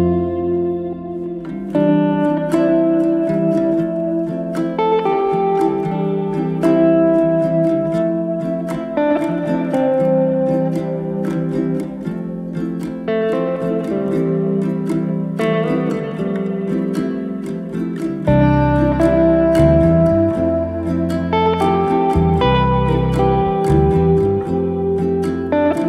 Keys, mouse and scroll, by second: 5.2-6.7 middle drag, 7.1 KP_1, 8.7 alt+d, 11.1-12.2 middle drag, 12.2 r, 15.1 z, 15.5 middle click, 16.1 s, 17.4 middle click, 18.0 s, 20.5-22.4 middle drag, 22.4 KP_1, 22.9-23.9 scroll up 2, 23.9 alt+d.